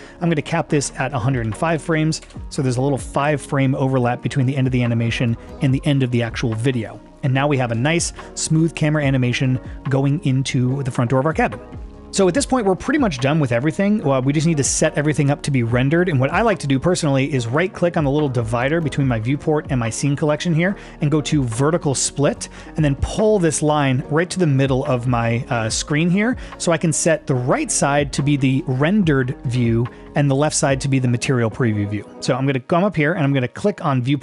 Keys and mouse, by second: 0.5-2.3 drag, 4.2-7.6 drag, 7.8 space, 12.3-14.4 drag, 20.8-30.1 right drag.